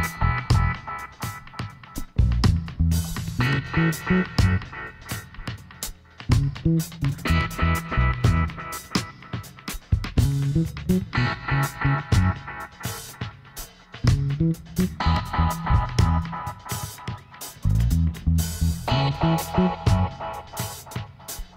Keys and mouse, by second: 0.0 click, 1.8 click, 2.9 middle click, 3.4-5.4 right drag, 5.0 e, 7.4-9.0 drag, 8.2 g, 9.8-12.7 drag, 11.4 right click, 11.5 middle click, 11.6 right click, 12.4-13.9 right drag, 13.3 e, 16.1 ctrl+z, 16.8-18.6 drag, 17.5 f, 19.1 ctrl+r, 20.1-21.5 drag.